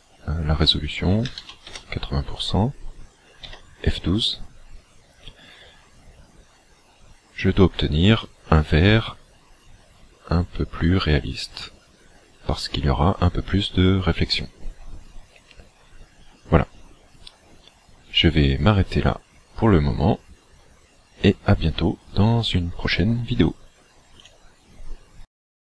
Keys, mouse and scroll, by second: 3.9 F12.